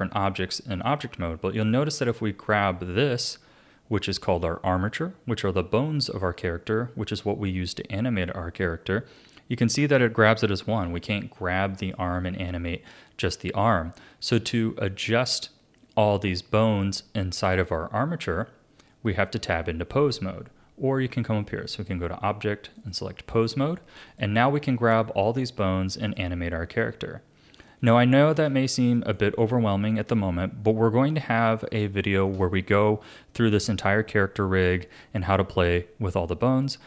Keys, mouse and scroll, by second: 1.8 click, 3.7-5.6 scroll up 3, 10.7 g, 12.7-15.7 scroll down 1, 21.7-24.2 drag, 24.6 r, 26.8-34.9 middle drag.